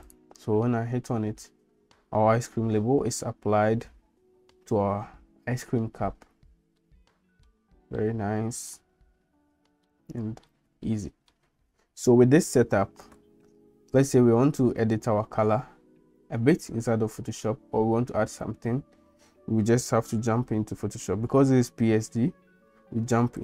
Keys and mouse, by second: 6.8 middle click, 8.0 shift+middle click, 9.9 shift+middle click, 11.0 middle click.